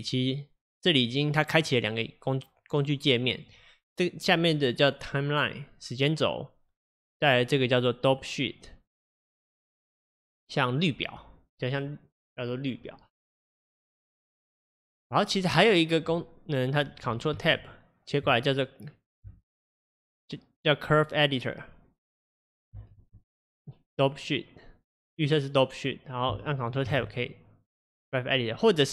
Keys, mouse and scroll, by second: 1.3-28.9 drag.